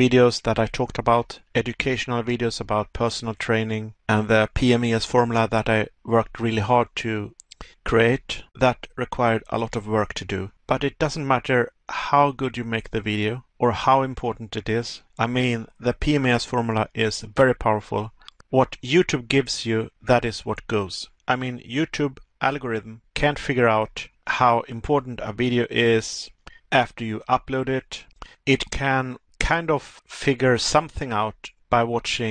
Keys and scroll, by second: 6.5 Pause, 9.4 Pause, 10.9 Pause, 13.7 Pause.